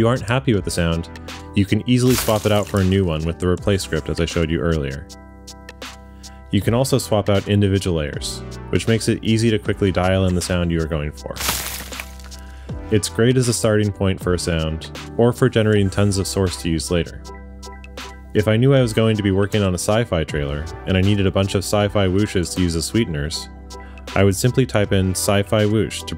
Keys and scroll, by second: 0.7 w, 1.8 space, 6.7 w, 9.4 w, 11.2 space, 13.3 space.